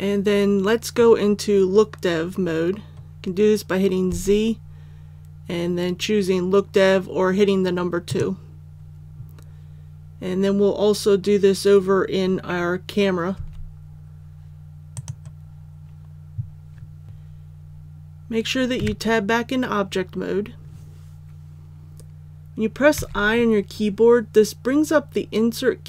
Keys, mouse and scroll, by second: 4.0 z, 8.0 click, 13.3 z, 14.9 click, 17.0 Tab, 22.9 i.